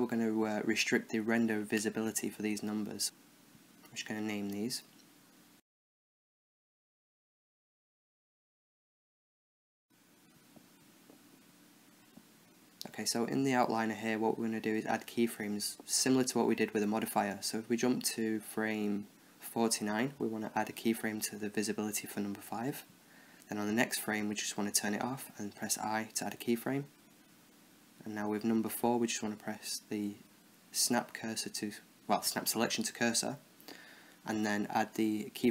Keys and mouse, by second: 1.2-2.8 middle drag, 2.2 n, 2.8 click, 3.4 right click, 3.7 click, 4.4-6.3 drag, 4.4 right click, 5.4 right click, 6.3 right click, 6.5 click, 7.4 middle click, 8.1-9.4 right drag, 9.7 Down, 13.0-14.3 middle drag, 15.4-17.7 drag, 18.5 Right, 18.8 Right, 19.0 Right, 19.3 Left, 21.5 i, 22.3 i, 23.3 Right, 24.3-26.3 drag, 25.8 i, 26.3 i, 27.6-28.9 right drag, 29.3 space, 30.5 Down, 31.6 Down.